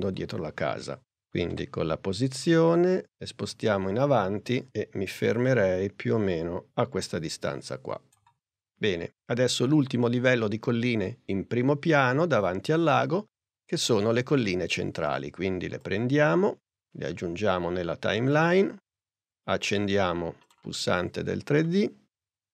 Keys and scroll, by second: 1.6 p.